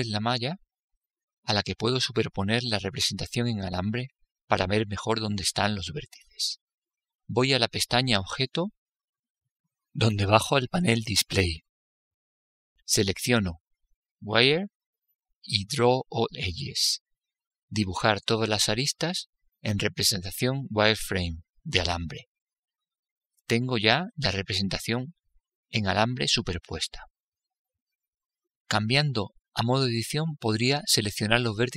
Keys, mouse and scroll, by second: 1.1-2.9 right drag, 3.4-5.4 right drag, 6.0-8.0 right drag, 7.4-9.4 middle drag, 8.7-10.6 right drag, 11.3-12.8 drag, 13.6-15.4 drag, 16.1-19.9 drag, 19.9-24.6 middle drag, 25.4-27.7 middle drag.